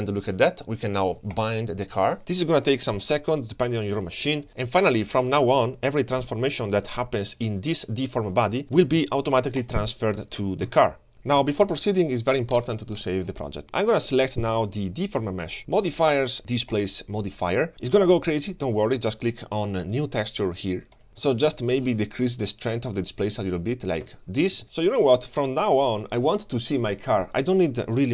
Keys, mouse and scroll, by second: 1.3-4.5 drag, 5.9-6.6 scroll down 2, 6.6 scroll up 1, 6.9 click, 7.4 click, 8.0 Tab, 8.1 click, 8.4 c, 10.1 g, 14.7 click, 16.1 click, 16.7-17.8 drag, 21.1 click, 21.7-23.3 shift+drag, 23.5 click.